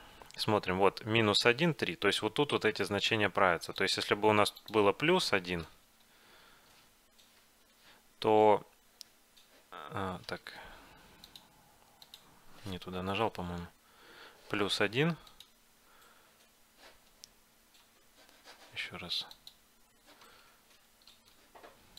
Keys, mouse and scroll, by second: 3.8-5.7 drag, 6.2 Left, 10.5 ctrl+z, 11.4-13.3 drag, 13.7 Left, 19.4-21.2 drag, 20.6 ctrl+z, 21.2 ctrl+z.